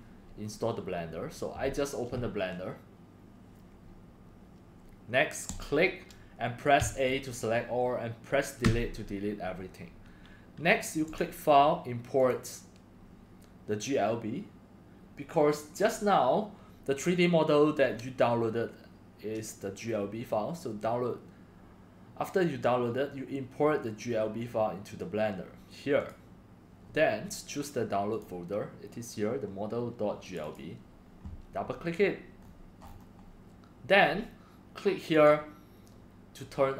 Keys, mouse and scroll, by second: 0.5-4.4 drag, 5.5 click, 6.3-6.8 drag, 6.8 a, 7.3 middle click, 8.6 Delete, 11.0 click, 11.2-11.8 drag, 12.2 click, 12.9-17.4 drag, 26.0 click, 26.1 click, 28.1 click, 30.2 click, 30.4 click, 31.9 middle click, 32.4 middle click, 32.8 scroll, 32.9 scroll up 1, 32.9 scroll, 33.2 scroll, 34.0 middle drag, 34.0 scroll up 3, 35.1 click, 36.4 click, 36.6 click.